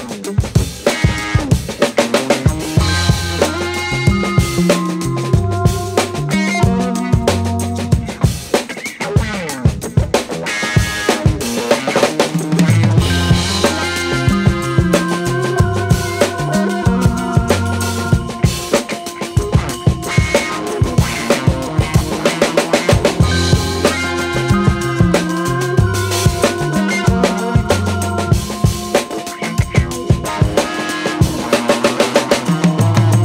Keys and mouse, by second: 0.4 r, 1.5 e, 2.5 r, 3.4 g, 4.3 s, 5.4 e, 7.5 r, 8.2 g, 9.0 s, 9.7 alt+z, 10.3 Tab, 10.6-11.8 middle drag, 12.2 Tab, 13.8 right click, 14.1 middle click, 15.0 g, 18.2 Tab, 18.5 middle click, 19.1 middle click, 19.6 Tab, 20.3 right click, 20.6 middle click, 21.2 g, 22.9 right click, 23.2 middle click, 24.1 alt+z, 24.2 right click, 24.5 alt+z, 24.7 g, 26.6 middle click, 27.3 Tab, 27.8 KP_3, 28.3 Tab, 28.9 g, 30.0 right click, 30.1 g, 30.9 right click, 31.3 g, 31.7 right click, 31.9 g, 32.7 Tab.